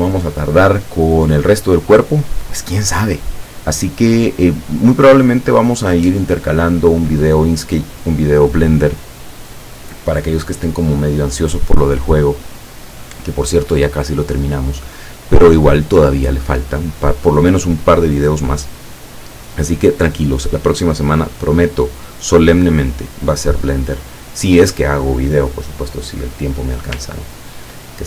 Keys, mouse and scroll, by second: 21.3-24.9 drag, 27.3-27.9 ctrl+scroll up 4.